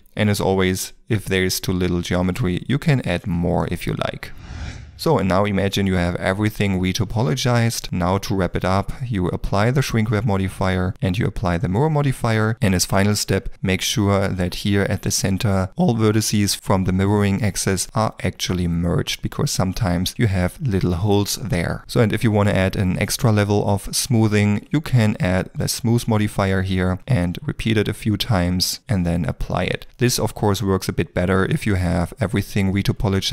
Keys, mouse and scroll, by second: 0.0 ctrl+middle click, 0.7 ctrl+middle click, 2.3 ctrl+r, 3.6 ctrl+middle click, 5.4 ctrl+middle click, 7.8 Tab, 12.0 Tab, 12.5 middle click, 13.1 alt+click, 13.5 middle click, 14.3 shift+middle click, 15.3 middle click, 16.5 g, 17.6 Escape, 17.9 middle click, 20.2 ctrl+middle click, 20.5 middle click, 20.9 shift+middle click, 21.2 ctrl+middle click, 21.4 Tab, 21.8 middle click, 33.2 ctrl+middle click.